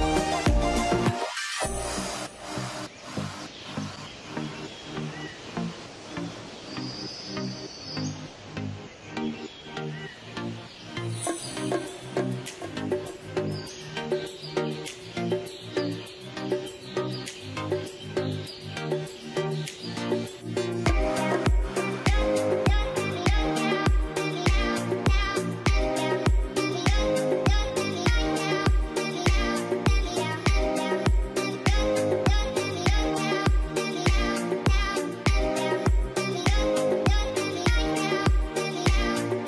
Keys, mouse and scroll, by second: 10.3 Return, 11.1 6, 11.5 Return, 11.5 0, 16.9 Return, 16.9 0, 19.9 double click, 22.6 scroll, 22.8 Return, 22.8 5, 25.3 ., 25.4 5, 25.8 Return, 28.3 Return, 32.1 ., 32.1 1, 32.3 Return, 38.3 double click.